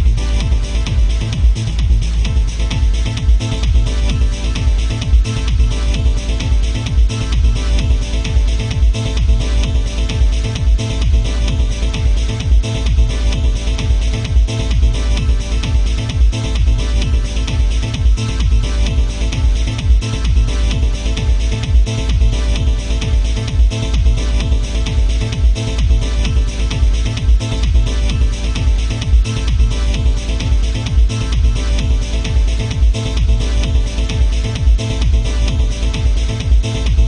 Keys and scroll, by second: 29.6 alt+space.